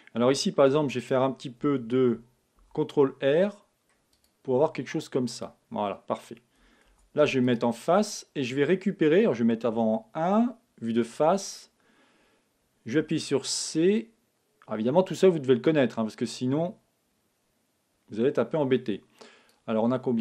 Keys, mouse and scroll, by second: 2.5 ctrl+r, 5.4-7.2 drag, 6.8 ctrl+t, 13.0 c.